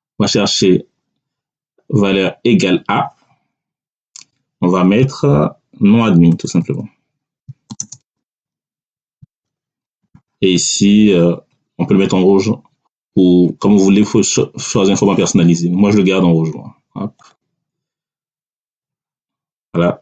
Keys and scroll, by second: 6.5-9.2 typing.